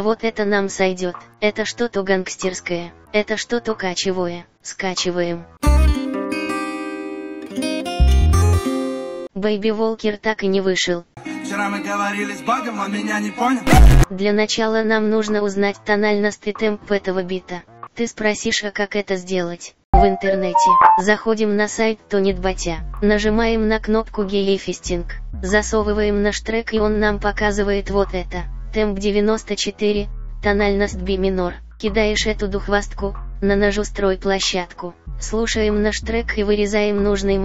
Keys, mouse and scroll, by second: 37.3 click.